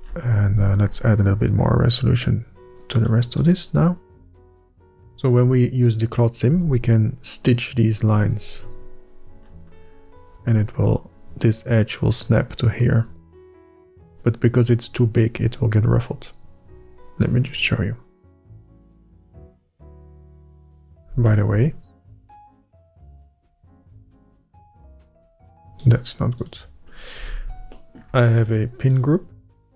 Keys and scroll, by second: 1.3 ctrl+r, 7.3 Tab, 21.5 Tab, 27.9 Tab.